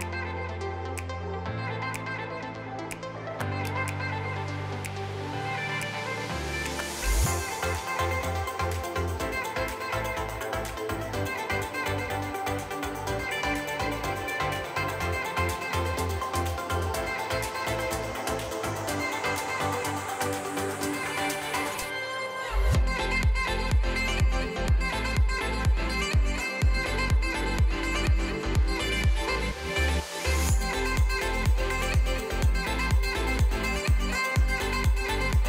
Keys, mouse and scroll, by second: 0.4 n, 0.6 click, 1.3 h, 1.6 shift+middle drag, 1.8-3.0 scroll up 3, 3.0-3.8 middle drag, 3.8 click, 4.1 click, 5.0 scroll down 1, 5.2-6.6 middle drag, 6.6 click, 7.1 l, 7.3 l, 7.5 click, 7.9-8.2 middle drag, 8.2 l, 8.5-9.3 middle drag, 9.3 click, 9.8 click, 10.7 h, 10.8 scroll down 3, 11.9 KP_3, 12.2 scroll up 3, 12.3 middle click, 12.7 KP_3, 12.9 shift+middle click, 13.4 click, 15.0 p, 16.0 ctrl+l, 16.5 p, 17.3 Tab, 17.6 Tab, 18.1 click, 18.4 shift+middle click, 19.1 click, 20.1 l, 20.7 drag, 21.2 l, 22.7 ctrl+l, 23.7 p, 25.5 click, 25.9-26.2 middle drag, 26.2 scroll down 4, 26.4 middle click, 26.6 a, 27.0 p, 27.6 click, 27.9 alt+h, 28.2 click, 28.5 Tab, 28.8 click, 29.3 click, 29.5 shift+middle click, 30.0 scroll up 1, 30.3 click, 30.7 click, 31.2 BackSpace, 31.4 BackSpace, 31.6 BackSpace, 32.3 m, 33.1 click, 33.6 scroll down 1, 34.0 click, 34.3 click, 34.6 click, 34.9 click.